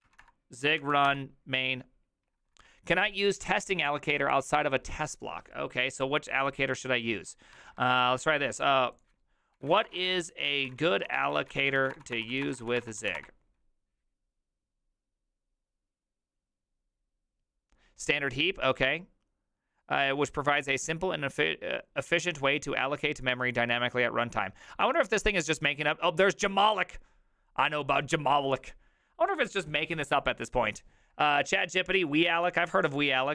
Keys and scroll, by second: 0.0 Up, 0.2 space, 0.8 Up, 1.1 Return, 7.6 alt++, 9.3-13.6 typing.